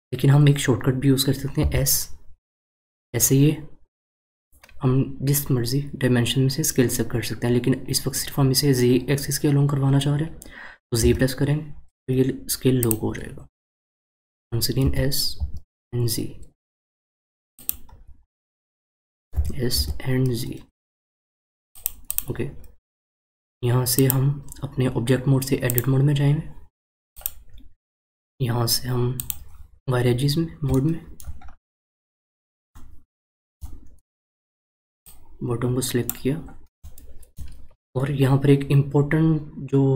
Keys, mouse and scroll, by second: 17.9-18.2 scroll down 2, 19.3 s, 22.1 click, 23.9-27.0 drag, 27.1 click, 29.6 click, 30.7 shift+middle click, 31.5-32.3 scroll up 4, 32.3-32.7 scroll up 1, 32.7-35.0 shift+middle drag, 35.0 drag, 36.8-39.9 shift+middle drag.